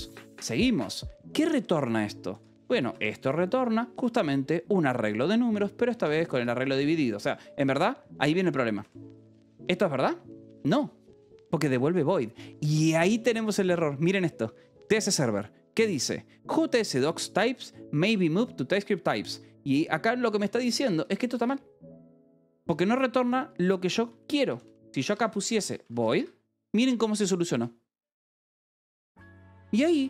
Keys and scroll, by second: 0.3 l, 0.7 space, 1.7-3.3 typing, 6.6 ctrl+g, 6.8 Escape, 9.1 j, 9.8 k, 11.6 h, 20.9 l, 22.6-26.5 typing.